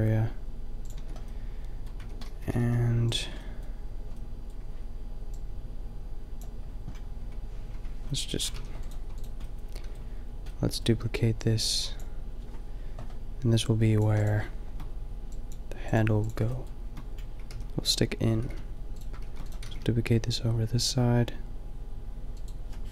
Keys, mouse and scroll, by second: 1.0 Tab, 2.0 Tab, 2.4 g, 3.1 Tab, 6.3 Tab, 7.1 Tab, 7.7 Tab, 8.5 a, 9.5-10.6 middle drag, 17.5 g, 17.9 click, 18.4 g, 19.2 shift+d, 19.7 g.